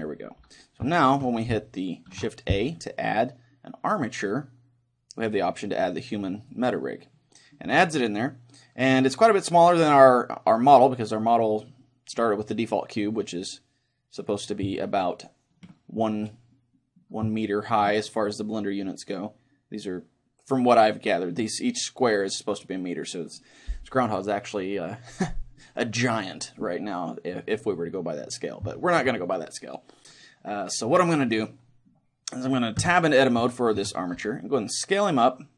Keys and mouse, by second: 0.9-4.0 middle drag, 2.1 shift+a, 14.8-17.3 middle drag, 17.5-19.3 middle drag, 28.8-31.2 middle drag, 32.8 Tab, 33.4 a, 33.8 a, 34.2 s.